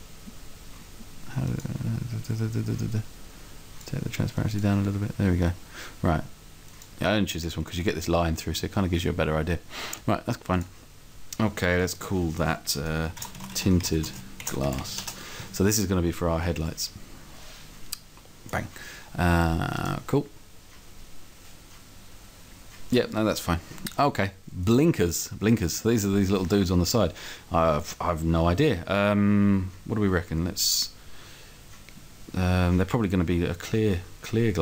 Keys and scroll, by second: 13.2-14.9 typing.